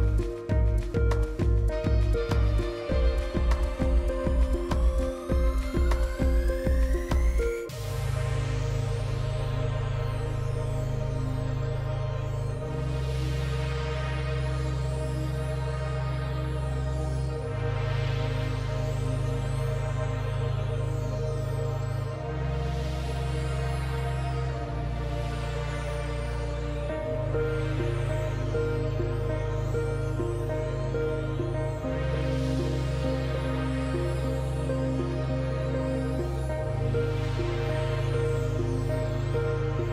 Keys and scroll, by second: 2.7 s, 3.2 shift+s.